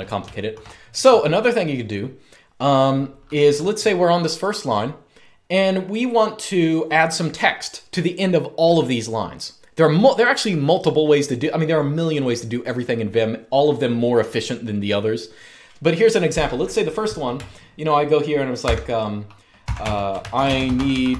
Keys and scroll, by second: 0.0-0.5 typing, 18.1-21.1 typing.